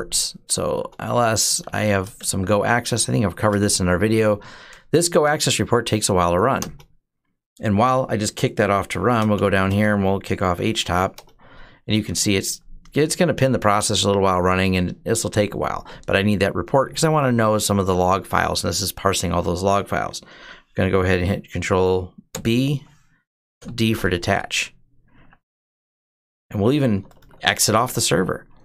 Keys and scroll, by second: 0.1-1.7 typing, 1.9 Tab, 2.7-3.5 typing, 6.4 Return, 8.7 ctrl+b, 9.1-11.0 typing, 22.1 ctrl+b, 23.3 d, 24.9 Up, 26.4-28.0 typing.